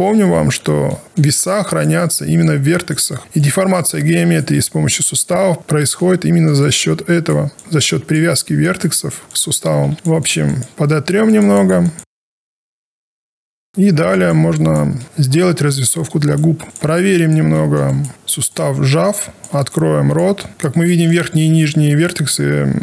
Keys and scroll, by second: 0.0 ctrl+z, 16.6 w, 18.1 e.